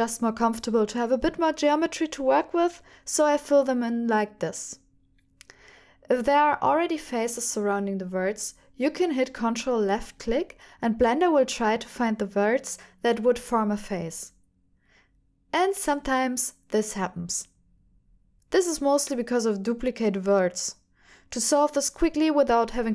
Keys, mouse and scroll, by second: 1.0 ctrl+r, 1.6 f, 2.5 ctrl+r, 3.6 click, 3.8 middle click, 4.5 f, 4.9 shift+click, 5.1 f, 5.3 middle click, 5.8 click, 6.6 ctrl+click, 6.9 ctrl+click, 7.4 f, 7.8 click, 9.1 ctrl+click, 10.3 shift+click, 10.6 shift+click, 10.9 shift+click, 11.1 middle click, 11.7 f, 11.8 middle click, 12.4 shift+click, 12.8 click, 13.1 ctrl+click, 14.0 shift+click, 14.2 f, 14.3 middle click, 15.8 f, 16.0-17.1 middle drag, 17.5-19.5 drag, 19.7 click, 19.8 middle click, 20.6 middle click, 21.7 middle click, 22.4 g.